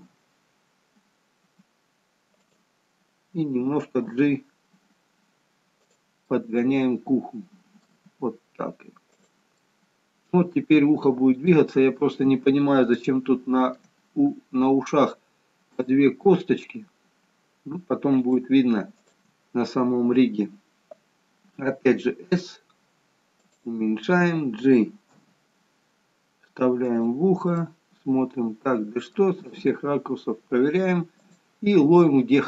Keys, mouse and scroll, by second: 0.1 s, 4.3 g, 6.3 middle click, 8.1 g, 9.7 middle click, 11.8-12.7 scroll up 2, 13.1 shift+middle click, 16.0 middle click, 18.2 click, 19.1 shift+click, 21.7 s, 25.4 g, 27.8 middle click, 29.5 g.